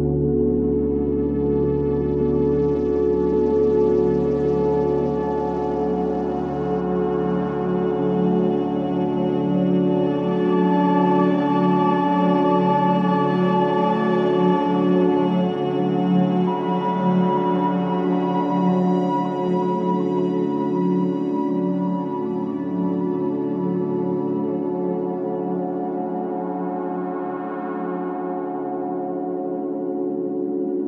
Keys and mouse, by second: 4.1-6.0 drag, 6.1 click, 7.8 Left, 8.6 click, 9.3 alt+shift+click, 9.9 click, 11.6 click, 12.1 click, 13.3 a, 14.8 i, 15.5 click, 16.5 click, 16.8 typing, 18.8 alt+r, 19.1 alt+g, 20.2-20.6 alt+shift+drag, 20.9 ctrl+alt+click, 22.8 i, 23.1 click, 23.9 click, 24.9 alt+shift+click, 25.3 ctrl+alt+drag, 26.0 alt+shift+drag, 26.2-27.2 typing, 26.4 click, 28.8 typing.